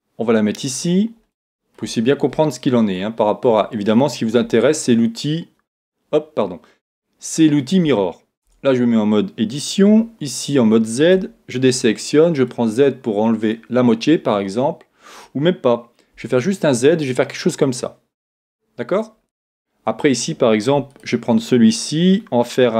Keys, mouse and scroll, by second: 1.4-5.0 middle drag, 4.4 KP_1, 5.7 KP_3, 8.4 Tab, 9.4 Tab, 9.9 z, 11.1 z, 11.6 a, 11.7 b, 16.1 s, 19.0 click, 19.4-21.2 middle drag, 21.0-22.7 right drag.